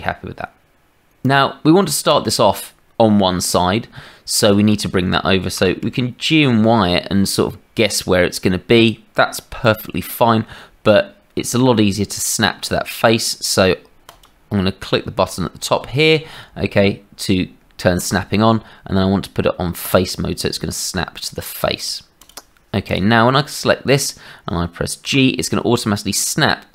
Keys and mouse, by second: 1.8 middle click, 3.5-4.5 middle drag, 5.5 g, 14.1 click, 18.1-22.2 drag, 23.2 click, 25.0 g.